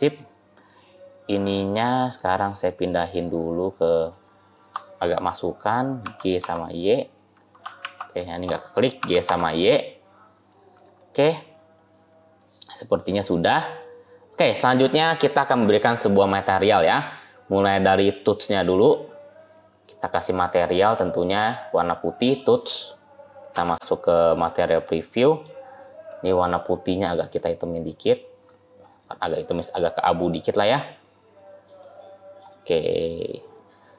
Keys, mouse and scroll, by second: 1.4 click, 2.0-4.5 shift+click, 5.9 g, 7.7 ctrl+z, 8.1 shift+click, 8.8 g, 10.6 click, 10.9 middle click, 13.1 scroll up 1, 13.9 scroll up 2, 14.2 scroll down 2, 16.3-16.8 scroll down 1, 16.8-17.3 scroll up 2, 17.3 scroll down 1, 17.3-18.1 scroll down 1, 18.1 click, 20.2 click, 21.6 click, 23.4 z, 24.7 middle click, 26.3 click, 28.6 click, 29.0 middle click, 30.9 middle click, 31.7 middle click.